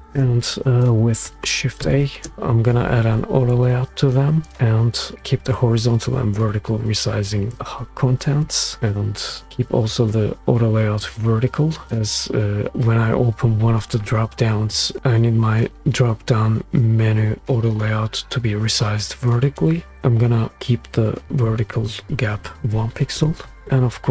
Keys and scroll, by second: 1.8 shift+a, 22.6 1, 23.1 Return.